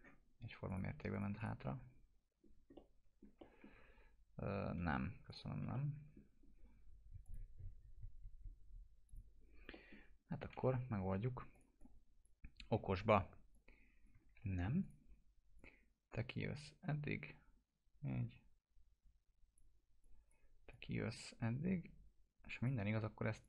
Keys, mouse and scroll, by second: 0.6 click, 1.6 F4, 2.4 scroll down 1, 2.7-3.3 alt+middle click, 3.8 ctrl+z, 5.3 click, 5.7-6.3 middle drag, 7.2 click, 7.9 scroll up 1, 9.0 click, 9.7 middle click, 9.9-10.3 scroll down 1, 10.5 t, 11.0 scroll down 1, 11.5-12.4 click, 12.9 w, 13.5-14.1 click, 14.3 ctrl+z, 14.8-19.6 drag.